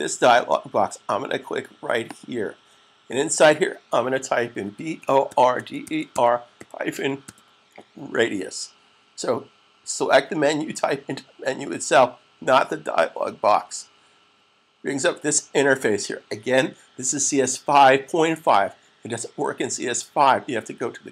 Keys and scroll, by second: 4.2-6.9 typing.